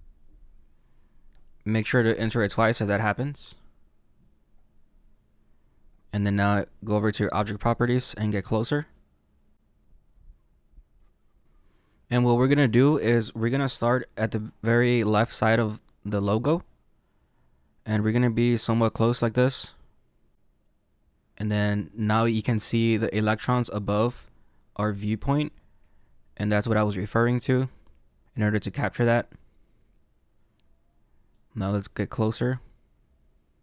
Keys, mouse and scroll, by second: 4.7-5.2 scroll up 2, 5.2-5.9 scroll down 2, 5.9-6.4 scroll down 1, 8.8 click, 10.1 click, 10.5 click, 16.1 click, 20.7 click, 21.1 click, 31.5 click.